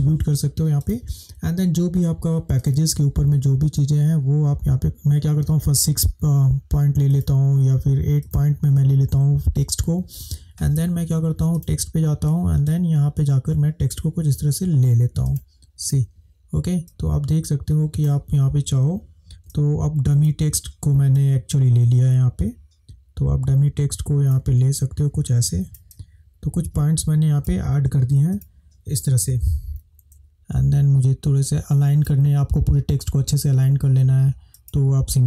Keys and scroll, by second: 4.8 Delete, 30.2 space.